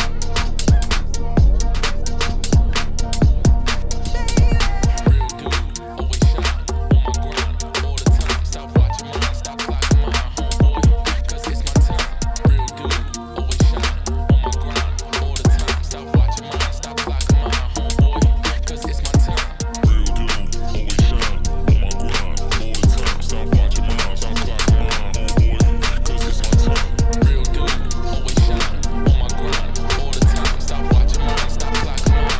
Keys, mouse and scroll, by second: 0.8 shift+middle click, 1.0 scroll up 5, 1.0-4.0 typing, 1.3 shift+middle click, 1.6 click, 2.6 click, 3.3 click, 3.8 click, 4.6 click, 4.9 click, 5.1 g, 5.5 ctrl+z, 6.6 click, 6.8 g, 7.5 click, 7.7 g, 8.3 click, 8.5 g, 10.1 scroll down 5, 10.3 Tab, 10.5 middle click, 10.7 z, 11.0 right click, 11.3 shift+middle click, 11.4-11.8 scroll up 5, 11.8 shift+middle click, 12.4 click, 12.6-13.9 middle drag, 15.5 click, 16.1 click, 16.5-17.8 drag, 19.1-19.7 scroll up 2, 19.7 click, 20.9-22.1 shift+drag, 23.2-26.1 drag, 26.4-27.7 shift+middle drag, 27.7 ctrl+2, 28.4-29.7 middle drag, 29.7-30.4 scroll up 1, 30.4 middle click, 31.1 Tab, 31.9 KP_Divide, 32.2 middle click.